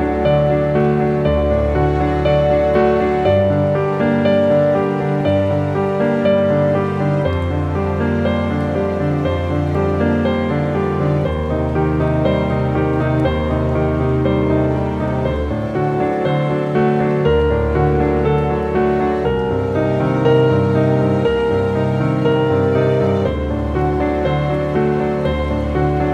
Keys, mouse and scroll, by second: 1.0 click, 1.6 click, 2.8 ctrl+t, 3.4-13.5 drag, 13.5 ctrl+t, 14.0-15.8 drag, 16.0 scroll up 1, 17.0-18.1 drag, 18.2 shift+click, 21.0 ctrl+t, 21.5-23.6 drag, 23.8-25.6 drag, 25.8-26.1 scroll down 1.